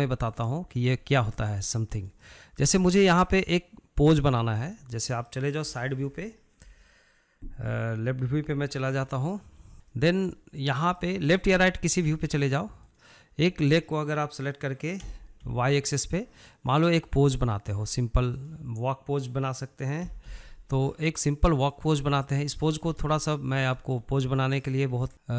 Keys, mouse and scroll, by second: 0.9 scroll up 2, 1.1-4.3 shift+middle drag, 4.3 click, 4.6-9.3 middle drag, 9.3 KP_3, 9.7 shift+middle click, 9.8 scroll up 1, 10.1-13.1 shift+middle drag, 13.1 click, 13.7-15.2 shift+middle drag, 15.2 g, 18.6 drag, 20.3 g, 22.3-22.8 scroll down 4, 22.8 shift+middle click, 23.1-23.4 scroll up 2, 23.4-23.7 shift+middle drag, 23.7 scroll up 3, 24.0 shift+middle click, 24.8 click, 25.1-25.3 shift+middle drag.